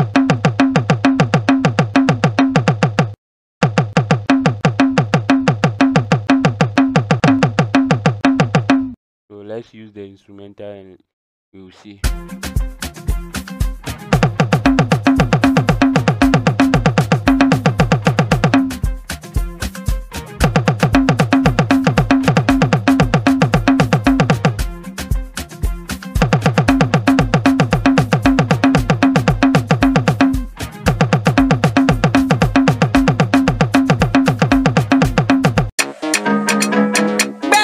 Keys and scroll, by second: 0.0-8.6 typing, 14.4-18.4 typing, 20.6-24.1 typing, 26.1-35.3 typing.